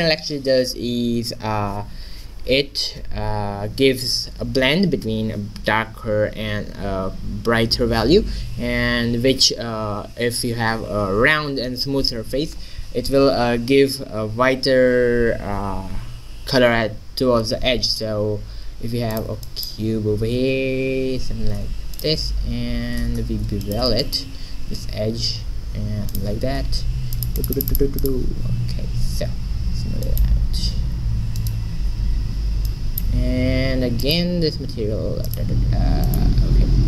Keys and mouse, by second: 17.8 shift+z, 18.1 shift+a, 20.5 g, 23.2 Tab, 24.0-25.9 drag, 24.8 ctrl+b, 27.2 click, 28.5 Tab, 29.5 z, 29.9 click, 30.1 middle click, 30.6 ctrl+z, 31.4 click, 31.9 shift+z, 32.9 click, 34.1 click.